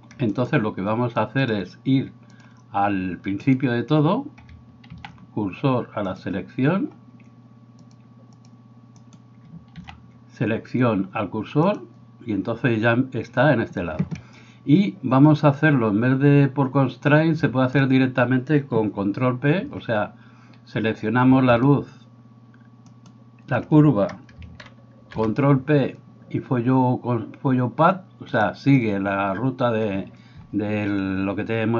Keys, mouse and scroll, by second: 0.3 middle click, 0.5-3.5 drag, 3.5 middle click, 3.6-31.7 drag, 5.0 shift+s, 9.0 middle click, 9.0 right click, 9.8 shift+s, 22.9 shift+right click, 24.9 ctrl+p.